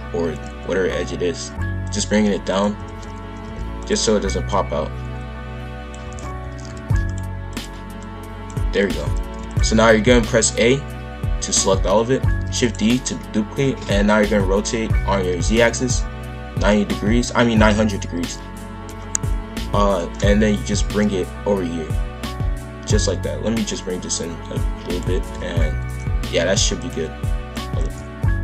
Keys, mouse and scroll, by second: 1.8 click, 2.5 click, 2.8 shift+f, 4.5 click, 6.1 shift+f, 7.5 click, 8.8 shift+f, 10.3 a, 12.4 shift+d, 13.7 r, 19.9 click, 25.1 shift+f, 27.8-28.4 drag.